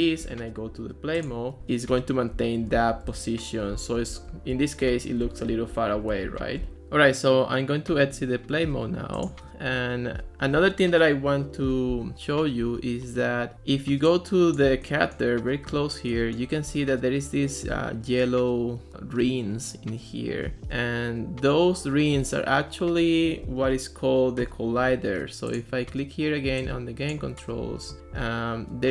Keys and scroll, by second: 1.3-7.2 typing, 9.3 s.